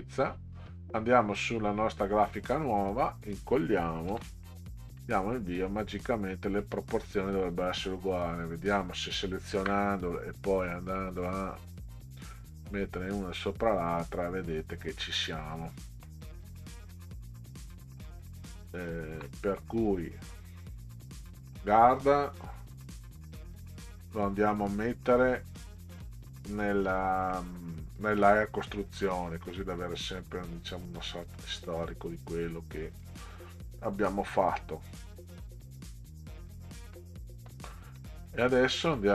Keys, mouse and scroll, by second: 0.7 click, 2.9 click, 4.1 ctrl+v, 4.9 KP_Enter, 6.7 middle click, 7.5 click, 9.3 shift+click, 10.9 click, 11.9 click, 16.1-16.5 middle drag, 21.4 click, 25.9 right click, 27.9 click, 29.3 click, 32.9 click, 37.0-37.5 middle drag, 38.4-38.7 ctrl+scroll up 2.